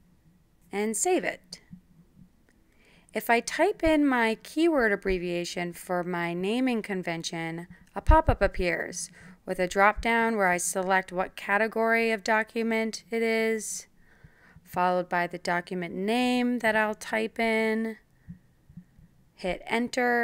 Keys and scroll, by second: 5.2-6.9 typing, 14.2-19.1 typing.